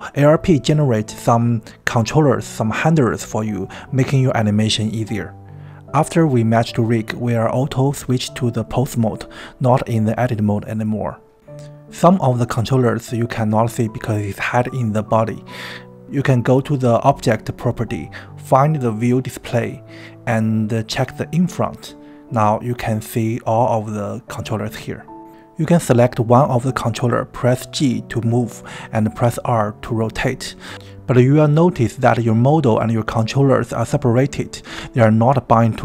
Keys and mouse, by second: 19.5 click, 21.7 drag, 23.7 click.